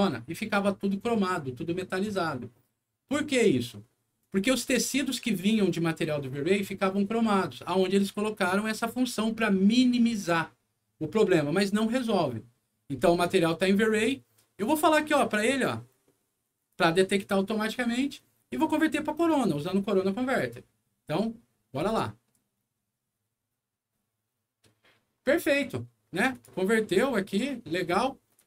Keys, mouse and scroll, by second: 8.6 click, 16.7 click, 21.7 click, 26.3 click, 28.3 click.